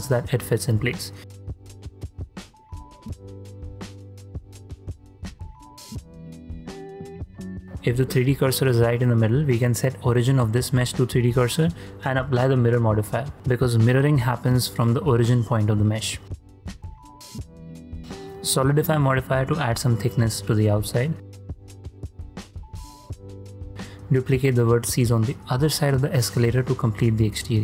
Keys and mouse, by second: 0.1 3, 1.2 g, 3.2 click, 6.3 s, 7.7-9.4 drag, 7.7 shift+c, 9.7-10.1 middle drag, 10.7-12.1 drag, 11.8 r, 12.9-15.3 middle drag, 15.9-16.6 middle drag, 17.5 click, 17.7-19.1 drag, 21.1 shift+click, 22.7 ctrl+a, 22.7 ctrl+middle click, 23.2 shift+middle click, 24.1 shift+d, 25.0 x.